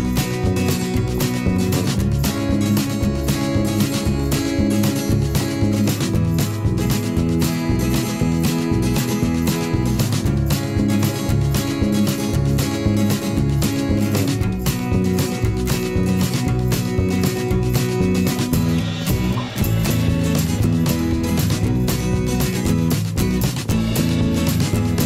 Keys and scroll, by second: 6.3 i, 6.7 v, 17.0 ctrl+a, 17.6 shift+Left, 17.8 shift+Down.